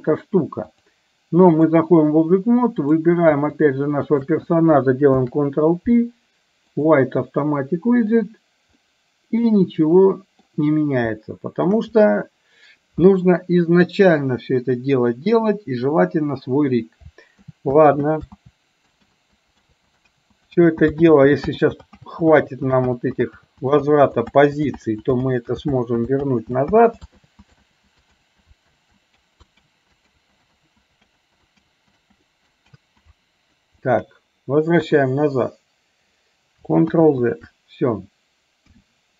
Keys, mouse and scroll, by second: 0.9-1.9 drag, 2.9 click, 3.5 shift+click, 4.1 shift+click, 5.3 ctrl+p, 8.9-10.5 middle drag, 11.3-11.8 shift+middle drag, 17.5 ctrl+z, 18.1 z, 19.1 ctrl+z, 19.8 ctrl+z, 20.4 ctrl+z, 20.8 ctrl+z, 21.1 ctrl+z, 21.6 ctrl+z, 22.1 ctrl+z, 22.5 ctrl+z, 23.0 ctrl+z, 23.5 ctrl+z, 24.0 ctrl+z, 24.4 ctrl+z, 25.0 ctrl+z, 25.4 ctrl+z, 25.8 ctrl+z, 26.3 ctrl+z, 26.9 ctrl+z, 27.4 ctrl+z, 27.8 ctrl+z, 28.3 ctrl+z, 28.9 ctrl+z, 29.3 ctrl+z, 29.8 ctrl+z, 30.3 ctrl+z, 30.6 ctrl+z, 31.3 ctrl+z, 31.8 ctrl+z, 32.3 ctrl+z, 32.8 ctrl+z, 34.9 KP_3, 37.0 ctrl+z, 38.8 KP_1.